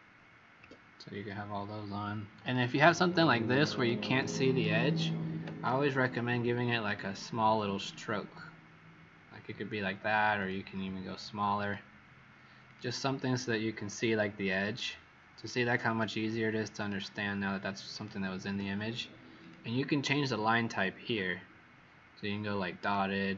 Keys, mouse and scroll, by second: 0.5 Escape, 2.3 click, 3.0 shift+click, 3.7 typing, 6.8 click, 16.7 shift+click, 17.9 typing, 19.4 click.